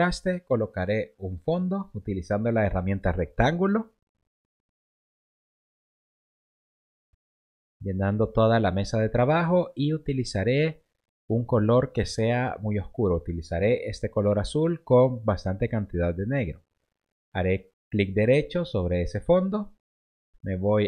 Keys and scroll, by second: 15.2 v.